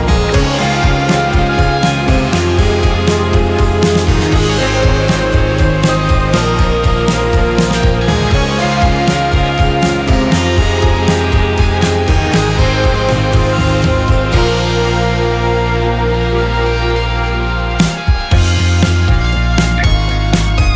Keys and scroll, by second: 5.2 2, 5.6 Return, 10.7 2, 11.0 Return.